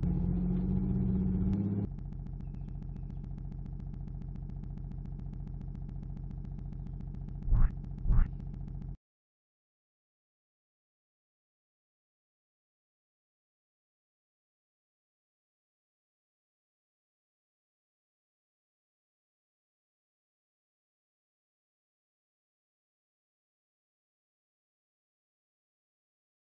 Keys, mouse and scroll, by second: 9.4 click.